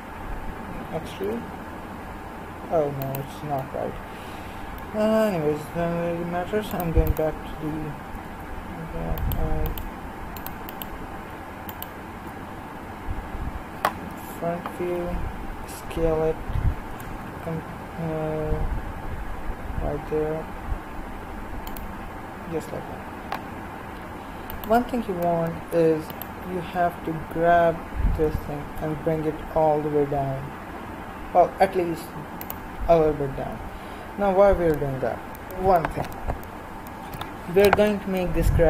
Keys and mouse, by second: 0.8 e, 9.2-14.2 right drag, 14.2 KP_1, 15.6 s, 22.4-24.5 middle drag, 24.5-28.2 right drag, 28.2 g, 32.9-36.9 middle drag.